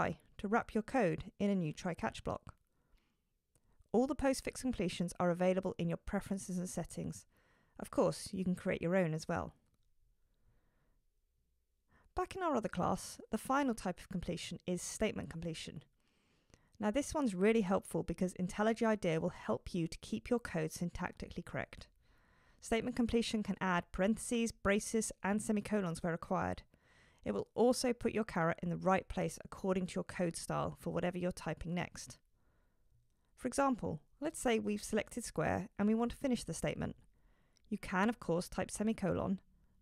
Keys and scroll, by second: 0.6 Return, 13.8 super+e, 37.9 shift+super+Return.